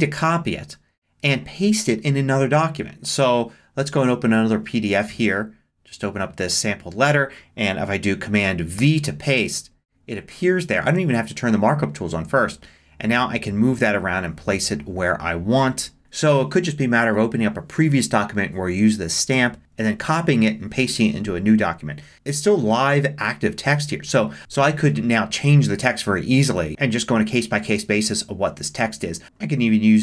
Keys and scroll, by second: 8.8 super+v, 24.4 shift+d.